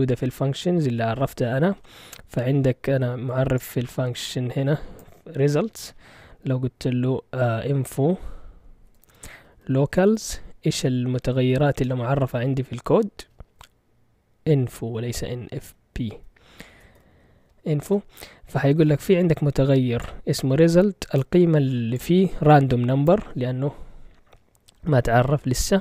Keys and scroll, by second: 7.7-10.9 typing, 11.7 Return, 15.0 Left, 15.6 Left, 15.7 Left, 15.9 Left, 16.1-16.9 Left, 16.7 BackSpace, 17.0 o, 17.8 Return.